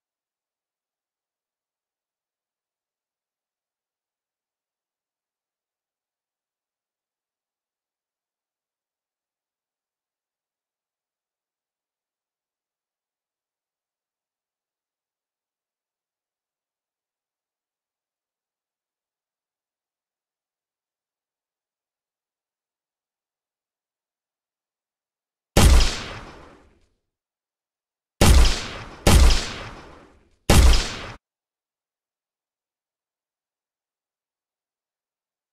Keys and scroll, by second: 7.9 space, 8.3 w, 9.2 space, 9.2 w, 10.4 space, 10.7 w, 11.8 w, 12.4 space, 12.7 w, 13.9-15.4 typing, 17.5 space, 17.8 w, 19.7 w, 19.8 space, 23.0 w, 27.6 d, 31.0 Escape.